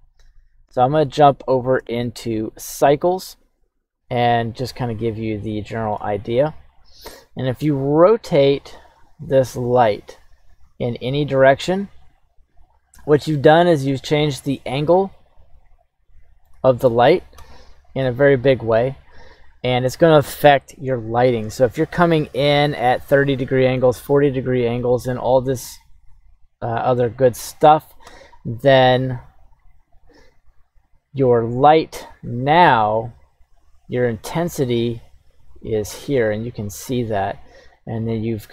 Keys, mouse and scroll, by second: 0.6 click, 1.1-1.7 shift+middle drag, 4.0 click, 4.0 s, 4.3 right click, 5.3-6.6 shift+middle drag, 10.0 r, 15.4-16.5 shift+middle drag, 17.7 q, 28.1 q, 31.9 click, 34.3-36.6 drag, 37.9-38.5 drag.